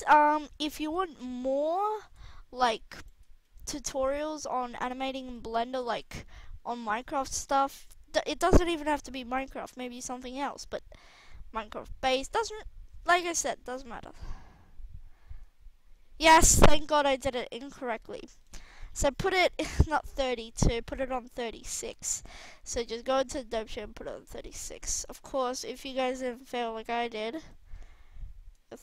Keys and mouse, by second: 0.5 middle drag, 1.0 a, 2.0 KP_1, 3.1 r, 3.8 r, 5.7 a, 5.9 a, 7.2 i, 12.4-14.0 right drag, 22.9 g, 24.1-24.8 drag, 26.1 g, 26.6-27.7 middle drag.